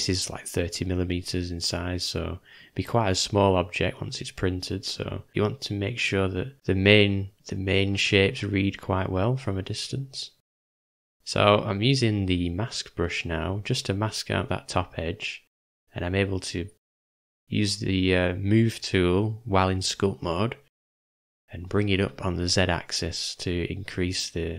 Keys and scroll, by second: 7.1 m, 7.4 [, 13.4 shift+/, 14.7 shift+m, 19.4 v, 21.5 u.